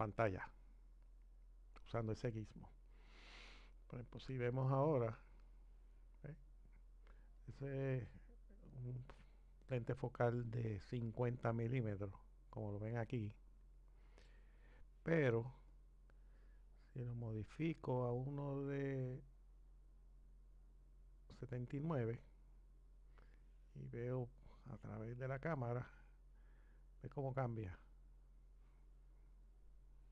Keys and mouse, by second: 5.0 click, 15.7 click, 18.9 click, 25.3 click.